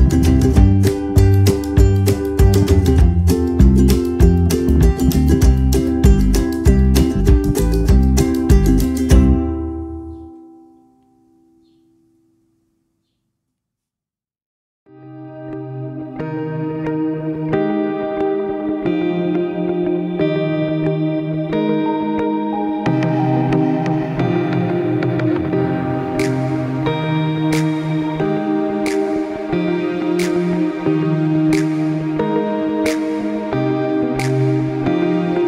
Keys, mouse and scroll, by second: 6.9 click, 10.7 click, 12.2 click, 14.6 click, 17.1 click, 20.0 click.